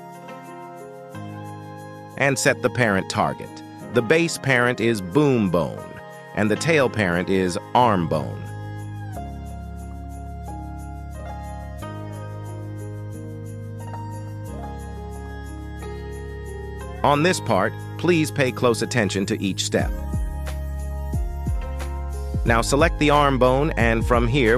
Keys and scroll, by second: 0.2 Tab, 1.8 shift+s, 10.3 g, 11.9 Escape, 22.4 g, 23.1 Escape.